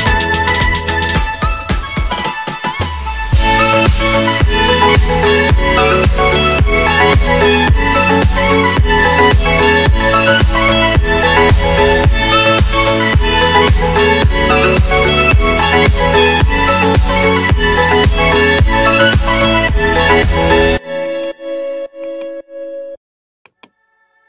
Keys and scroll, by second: 8.7 shift+Page_Up, 18.1 ctrl+Page_Down, 22.9 g.